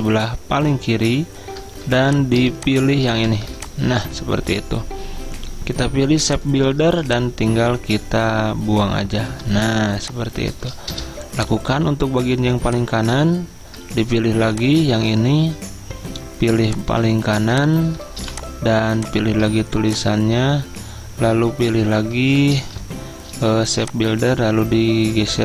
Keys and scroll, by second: 0.5 v, 3.7-4.4 typing.